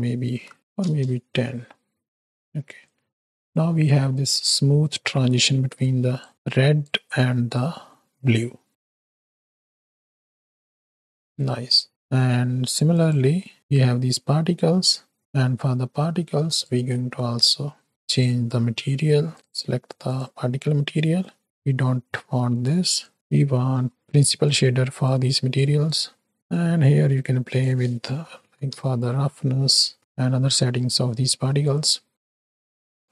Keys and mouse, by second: 2.0-2.3 middle drag, 2.7-3.5 right drag, 3.8-4.2 middle drag, 5.8-6.2 drag, 6.3 click, 7.0 middle click, 7.6-8.7 drag, 8.7 space, 11.3 space, 12.8 click, 17.9-19.3 drag, 19.3 click, 21.1 right click, 22.2 x, 23.1-24.5 drag, 25.1-25.6 drag, 25.8 click, 26.3 right click, 27.5-30.0 drag, 30.9 middle drag.